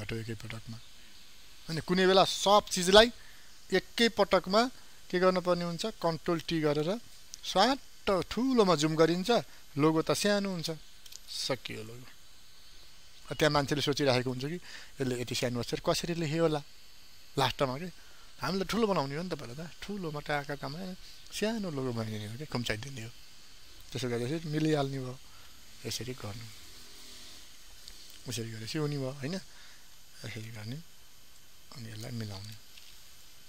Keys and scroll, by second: 6.1 ctrl+t, 13.9 ctrl+space, 24.7 ctrl+o, 27.4 ctrl+0, 30.0 ctrl+t.